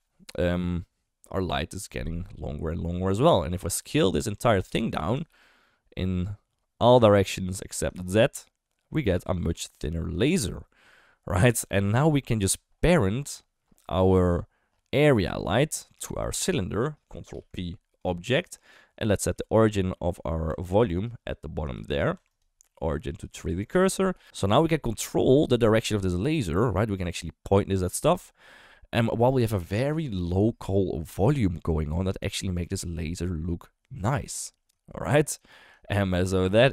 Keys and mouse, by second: 3.3 click, 4.4 Tab, 4.6 a, 5.1 s, 7.7 s, 9.5 Tab, 9.7 click, 15.4 click, 16.3 shift+click, 17.3 ctrl+p, 18.7 click, 19.1 middle drag, 20.0 middle drag, 20.5 Tab, 20.7 3, 21.0 click, 21.8 shift+s, 22.2 Tab, 22.3-23.3 right drag, 24.1 KP_1, 25.2 right click, 25.8 r, 32.8 shift+middle drag, 34.8 shift+middle drag, 35.9 shift+middle drag.